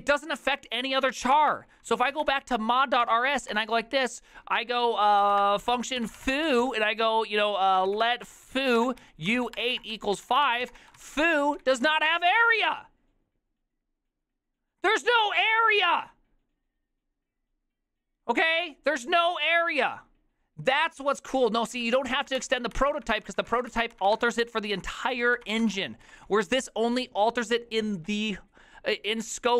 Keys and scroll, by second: 1.1-3.7 typing, 5.0-12.4 typing, 21.8 ctrl+c, 22.0-26.7 typing.